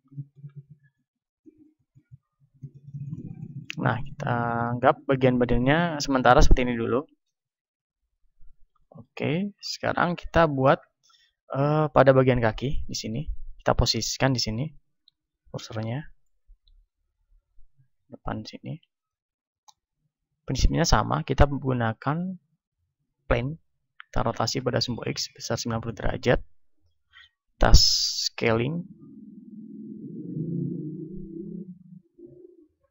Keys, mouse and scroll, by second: 2.6 Tab, 7.4 KP_1, 8.4-12.9 middle drag, 9.8 a, 12.9-20.5 drag, 20.5-21.7 middle drag, 21.2 shift+a, 22.6 click, 22.6 middle click, 24.1 r, 25.7-27.7 drag, 28.1 s, 29.8-32.8 drag, 31.7-32.9 middle drag.